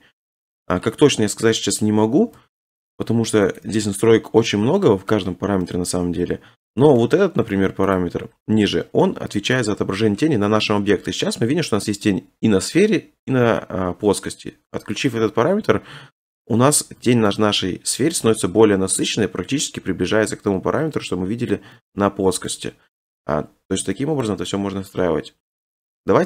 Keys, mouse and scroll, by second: 1.4 middle click, 2.2 g, 2.4 z, 3.6 shift+middle click, 4.5 middle click, 4.5-5.0 scroll, 5.0-5.6 scroll, 6.1-7.0 scroll, 7.0-7.6 scroll, 8.0 click, 9.5 scroll, 9.8 middle click, 10.0 middle click, 10.7 middle click, 15.1 click, 16.4 middle click, 16.5 middle click, 17.1 shift+middle click, 17.3 shift+middle click, 17.5 middle click, 17.7 middle click, 18.3 scroll down 3, 18.3 shift+middle click, 18.5 middle click, 18.6 scroll up 5, 18.8-19.3 scroll, 19.7 middle click, 19.9 click, 21.5 click, 22.5 middle click, 22.8 middle click, 22.9 middle click, 23.7 middle click, 24.2 middle click, 25.7 click.